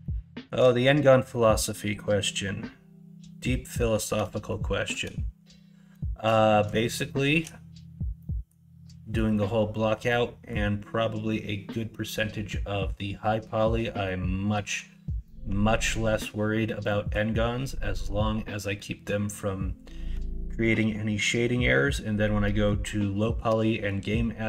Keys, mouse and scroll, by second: 0.0 shift+middle click, 4.4 shift+middle click, 7.0 shift+middle click, 8.1 middle click, 9.1 middle click, 10.0 middle click, 14.0 middle click, 15.2-16.2 middle drag, 16.8 middle click, 18.7 middle click, 20.9 middle click, 22.4 middle click, 23.2 shift+middle click, 23.6 middle click.